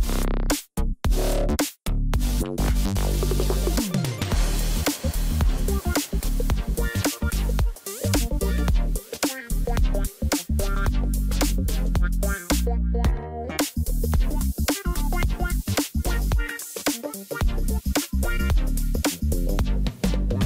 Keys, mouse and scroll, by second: 5.9 ctrl+click, 9.2-10.7 scroll up 19.